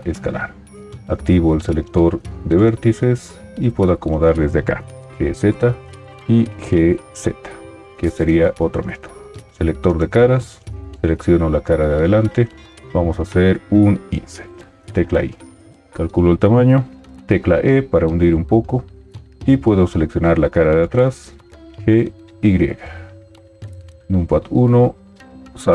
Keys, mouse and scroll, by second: 5.0 g, 5.0 z, 15.2 i, 17.5 e, 21.8 g, 21.8 y, 23.9 KP_1.